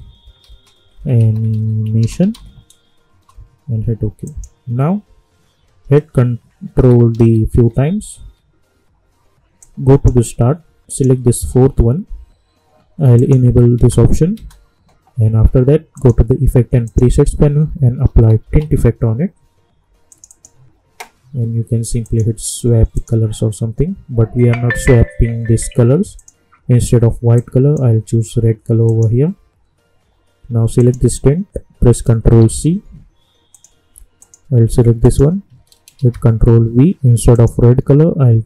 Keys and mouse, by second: 0.2-2.8 typing, 3.1 Return, 4.2 click, 4.8 -, 6.7 ctrl+d, 9.6-10.9 drag, 13.1 click, 13.7 space, 15.9 click, 17.7-19.1 typing, 20.1 click, 26.1-28.8 drag, 32.4 ctrl+c, 33.5 click, 35.9 ctrl+v, 37.3 click.